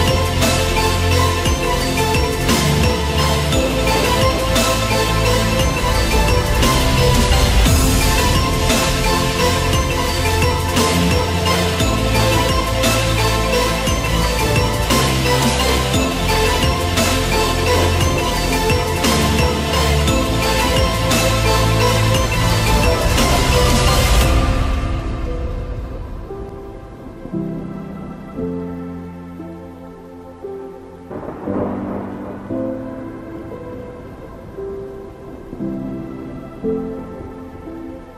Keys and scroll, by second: 4.4 ctrl+0, 29.5 ctrl+0.